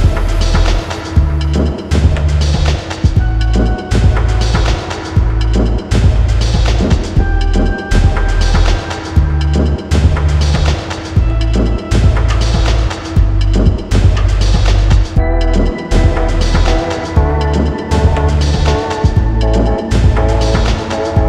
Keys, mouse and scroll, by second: 5.4-5.7 scroll down 1, 7.2 scroll down 1, 9.5-21.2 drag.